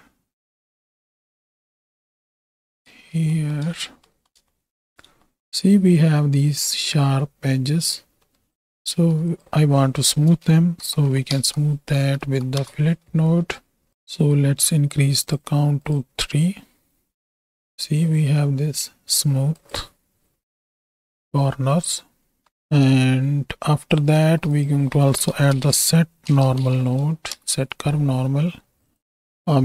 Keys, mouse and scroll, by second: 1.6 space, 2.6 space, 3.2 shift+middle click, 8.3 middle click, 8.6 click, 8.9 shift+a, 11.4 l, 15.2 click, 15.9 click, 19.6 click, 20.4 m, 20.9 m, 21.3 m, 21.8-22.5 m, 22.8-23.9 drag, 24.2 shift+a, 29.4 click.